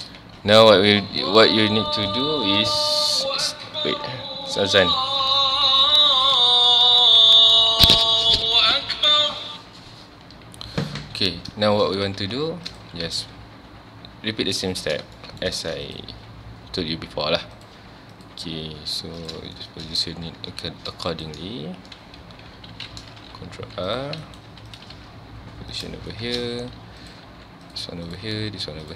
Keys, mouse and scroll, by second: 0.2 Tab, 0.6 click, 1.0 Tab, 1.3 1, 12.7 click, 13.0 g, 14.8 click, 15.0 scroll down 2, 15.2 shift+middle click, 15.9 click, 16.1 g, 18.1 click, 18.5 g, 19.3 click, 19.6 shift+middle click, 19.9 scroll up 1, 20.4 ctrl+r, 21.2 right click, 23.6 ctrl+r, 24.4 right click, 24.5 1, 24.7 click, 25.0 g, 25.8 click, 26.1 shift+middle click, 26.4 scroll up 1, 27.0 click, 27.3 g, 28.1 click, 28.3 g.